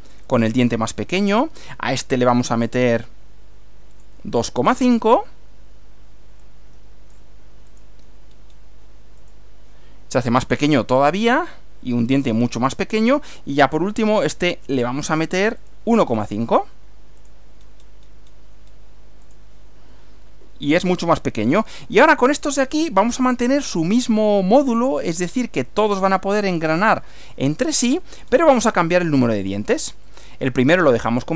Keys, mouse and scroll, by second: 0.3 click, 4.0 click, 4.5 click, 6.4-7.3 drag, 7.7 click, 8.3-8.7 scroll down 2, 9.2 click, 11.2-12.4 middle drag, 12.6 click, 14.4-15.0 drag, 15.6 click, 16.2 click, 17.2 click, 18.6 scroll up 2, 19.2 click, 20.6-21.8 middle drag, 23.3-24.6 shift+middle drag, 24.8 shift+middle click, 28.3-28.8 scroll down 2, 30.0 click.